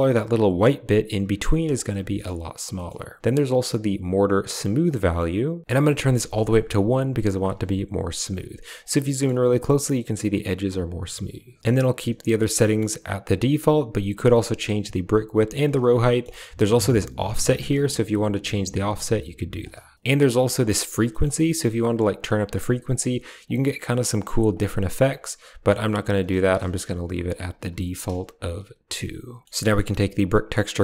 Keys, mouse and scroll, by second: 2.0 middle click, 2.6 middle click, 4.7 click, 4.8 click, 5.6 click, 9.0 shift+click, 12.5 click, 13.6-14.6 shift+drag, 14.9 shift+click, 15.9 middle click, 16.6 click, 18.4-19.5 drag, 21.1 shift+middle click, 22.1 click, 22.5 click, 22.8 click, 23.3 click, 23.7 click, 24.1 click, 24.2 click, 24.4 click, 24.9 click, 25.0 click, 26.4 ctrl+z, 26.8 ctrl+z, 26.9 ctrl+z, 27.1 ctrl+z, 27.3 ctrl+z, 27.5 ctrl+z, 27.9-29.4 drag, 29.5 middle click, 30.7-30.8 drag.